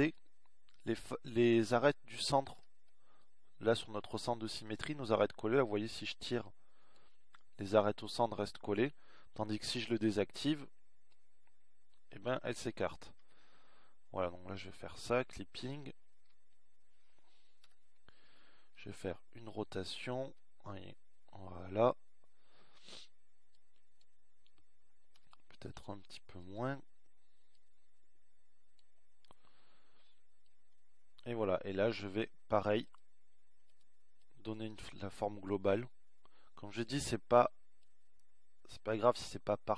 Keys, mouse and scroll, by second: 5.3 z, 11.6 ctrl+z, 16.0 ctrl+z, 18.5 KP_1, 19.2 KP_1, 20.6 z, 23.3 r, 26.9-28.2 drag, 28.2 r.